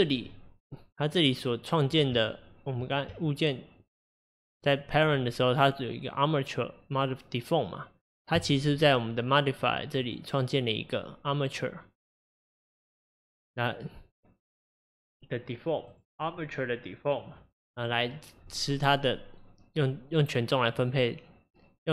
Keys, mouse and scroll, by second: 2.2 Tab, 3.1 Tab, 3.7 Tab, 3.7 Tab, 4.6 Tab, 8.3 click, 10.1-13.1 drag, 15.9-17.7 drag.